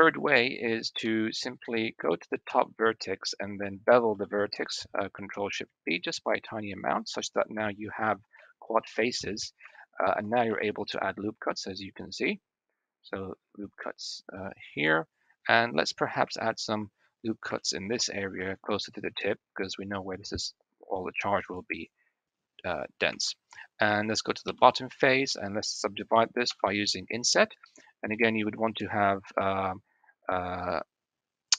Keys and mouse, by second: 0.9 1, 1.5 click, 2.5 click, 4.0 ctrl+shift+b, 7.4 KP_1, 8.3 shift+click, 8.7 shift+middle click, 9.6 shift+middle click, 10.4 ctrl+r, 16.2 shift+middle click, 17.4 shift+middle click, 18.2 ctrl+r, 23.1 shift+middle click, 23.7 click, 24.4 3, 24.6 click, 25.3 click, 26.4 i.